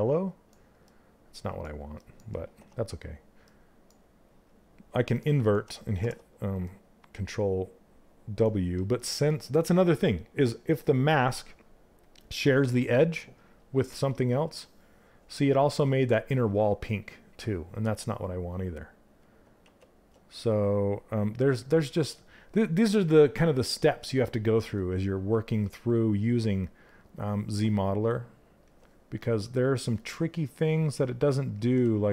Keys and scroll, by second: 2.1 e, 17.4 ctrl+z, 19.2 ctrl+z, 31.4 ctrl+z.